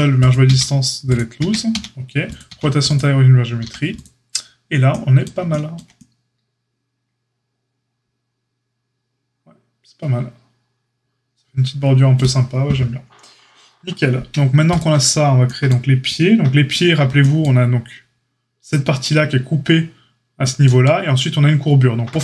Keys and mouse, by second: 0.4 q, 1.3 Tab, 1.6 q, 2.4 q, 3.6 a, 14.6 click, 14.7-22.2 middle drag.